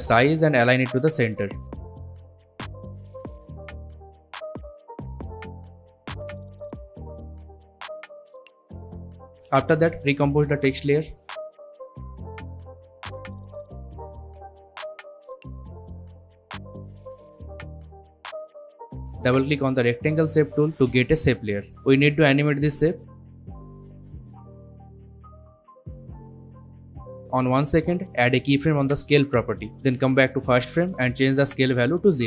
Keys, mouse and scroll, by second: 0.8 s, 1.4-2.5 drag, 3.5 BackSpace, 3.7 Return, 4.6 click, 10.4 right click, 11.4 click, 12.0-13.5 typing, 14.3 click, 16.5-16.9 scroll down 1, 16.9-17.5 scroll up 1, 17.5 click, 17.8 right click, 18.2 click, 23.7-25.3 drag, 26.1 s, 27.7-28.5 drag, 31.3 Return, 32.0-32.2 drag.